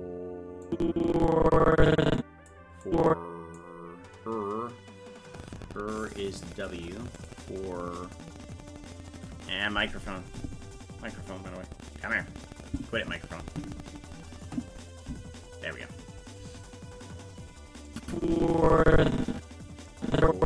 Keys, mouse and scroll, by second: 0.7-2.5 drag, 2.9 click, 6.1 click, 7.2 click, 17.9-20.4 drag.